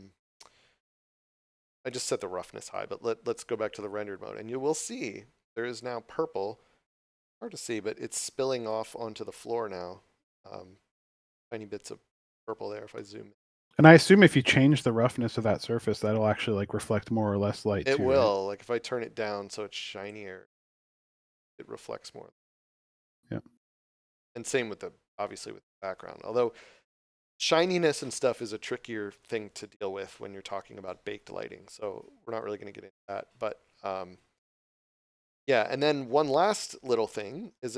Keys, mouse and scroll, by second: 3.3 click, 8.5 right click, 12.2 scroll up 1, 18.4 click, 22.6 middle click, 33.5 click, 35.6 middle click.